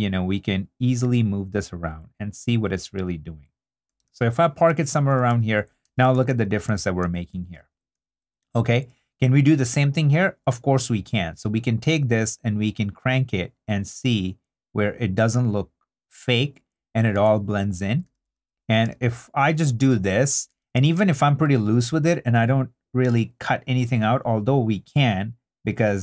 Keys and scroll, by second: 4.1 super+d, 5.3 super+1, 5.8 i, 6.3 super+d, 7.9 super+2, 8.6 2, 17.2 super+d, 20.5 super+i, 20.7 2.